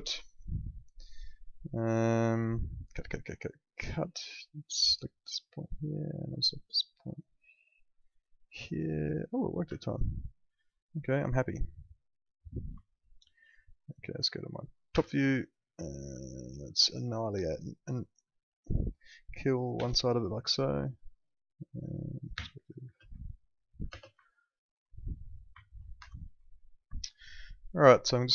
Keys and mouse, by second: 8.4 click, 9.4 w, 9.8 alt+middle click, 12.2 click, 12.8 alt+middle click, 14.3 alt+middle click, 14.9 t, 16.4 middle click, 17.6 click, 19.7 Delete, 21.1 click, 22.3 p, 22.8 space, 23.3 alt+middle click, 23.9 space, 24.3 alt+middle click, 25.6 alt+middle click, 25.9 F3, 26.4 alt+middle click.